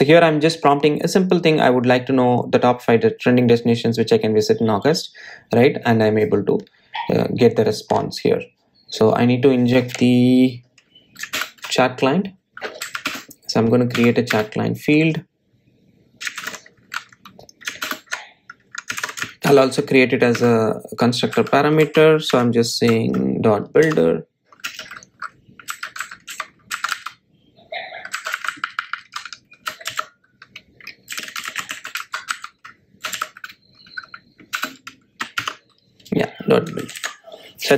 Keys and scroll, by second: 12.8 alt+Return, 15.3 alt+Return, 17.2 Return, 17.7 super+z, 19.1 super+z, 20.8 alt+Return, 25.2 Tab, 35.9 Return, 36.7 Return, 37.2 Tab.